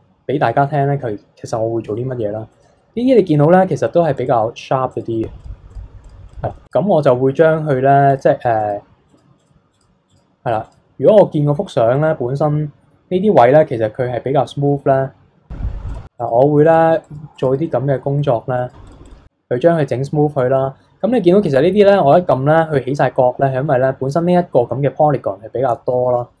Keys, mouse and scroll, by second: 0.0-1.8 scroll up 3, 1.8 f, 3.1-7.0 drag, 7.0-8.0 middle drag, 8.0-11.0 drag, 11.0-11.9 scroll down 7, 11.3 middle click, 11.9-15.0 middle drag, 15.0-15.9 scroll up 5, 15.9-17.6 drag, 17.6 middle click, 18.5 click, 19.3 scroll down 2, 19.6-20.9 middle drag, 20.9-23.4 scroll up 7, 23.4-26.0 middle drag, 26.0-26.4 scroll down 3.